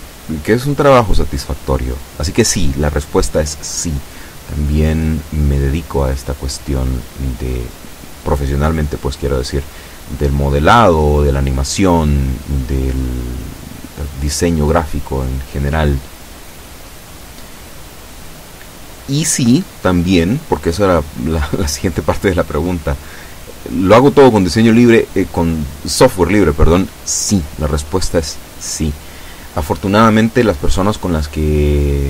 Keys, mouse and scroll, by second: 4.9-9.0 drag, 13.7 b, 14.4-16.2 drag, 20.1 e, 25.3-26.6 drag, 31.0 a, 31.8 b.